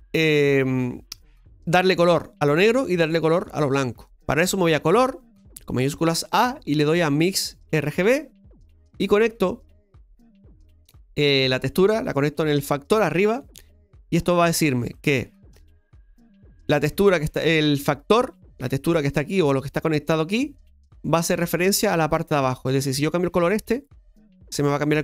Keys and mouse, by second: 9.9-13.0 drag, 14.9 middle click, 22.9-25.0 drag.